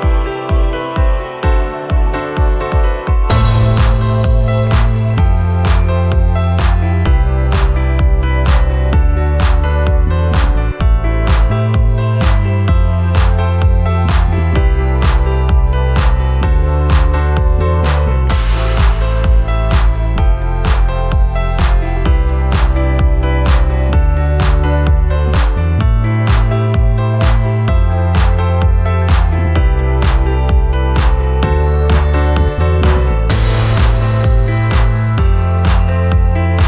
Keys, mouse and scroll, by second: 1.3 click, 1.9 click, 2.5 click, 4.6 click, 6.6 click, 11.2-11.6 scroll up 3, 11.7 alt+click, 12.1 scroll down 1, 12.3 alt+click, 12.7 shift+right click, 13.4-13.8 scroll down 6, 13.9 alt+middle click, 14.2 alt+middle click, 14.2-14.6 scroll up 2, 14.5 middle click, 15.0 alt+click, 16.1 alt+middle click, 16.3 scroll up 2, 16.6-18.2 alt+drag, 18.4 scroll up 1, 18.6 alt+middle click, 18.9 scroll down 2, 19.1 alt+click, 19.5-20.0 scroll down 3, 20.2 alt+middle click, 20.7 alt+click, 21.4 scroll up 2, 21.7 alt+middle click, 22.1 scroll up 2, 22.4 alt+click, 23.1 scroll down 1, 23.4 alt+click, 23.7 alt+middle click, 24.3 scroll down 2, 24.5 alt+click, 26.3 scroll up 2, 26.6 alt+middle click, 27.2 scroll up 1, 27.5 alt+click, 28.4 scroll up 2, 28.8 alt+middle click, 29.1 scroll up 2, 29.5-30.7 alt+drag, 31.2 scroll up 2, 31.6 alt+middle click, 32.6 click, 34.3 click, 35.5 click.